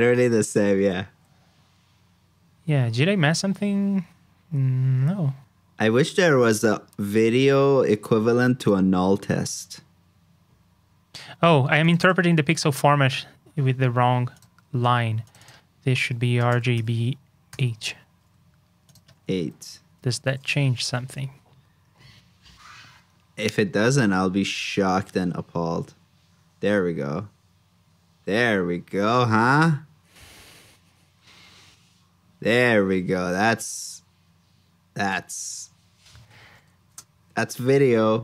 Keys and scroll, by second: 0.8 super+j, 19.4 super+c, 20.0 super+s, 36.8 super+j.